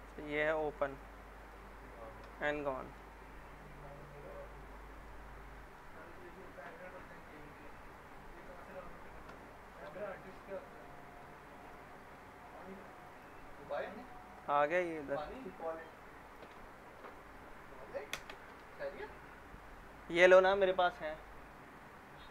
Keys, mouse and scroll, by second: 0.9 click, 2.2 Delete, 2.7 middle click, 3.0-4.2 scroll down 1, 4.2 click, 4.5 scroll down 1, 5.1-6.0 alt+middle click, 6.0-7.7 scroll up 1, 7.8 click, 9.3 Delete, 10.0 alt+middle click, 10.5-11.6 scroll up 1, 11.6 click, 13.4 scroll down 1, 13.7-14.3 alt+middle click, 14.4 scroll up 1, 16.3 click, 18.1 ctrl+BackSpace.